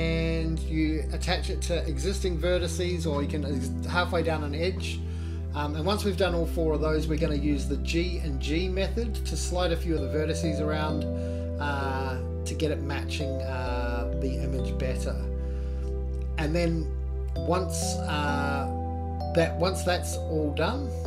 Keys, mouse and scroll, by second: 4.2 1, 5.5 click, 7.0 g, 8.4 click, 8.8 g, 11.0 click, 12.1 click, 12.4 g, 14.5 click, 14.7 g, 16.4 click, 16.6 g, 19.8 click, 20.1 g.